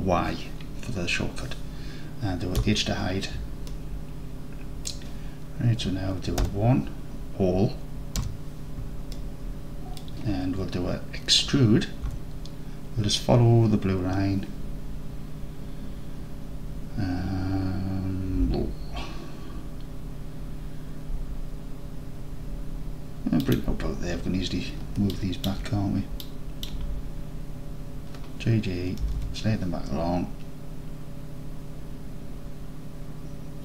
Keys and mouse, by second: 2.7 h, 3.7-4.9 alt+drag, 6.5 1, 8.3 a, 9.2-10.0 alt+drag, 12.1 e, 23.5 click, 25.3 click, 26.3-26.7 shift+drag, 29.1 g, 29.2 g.